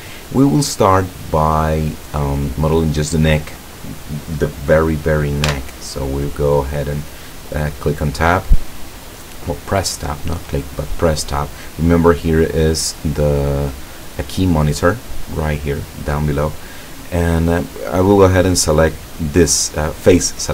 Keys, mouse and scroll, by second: 3.8 right click, 5.6 Tab, 20.3 click.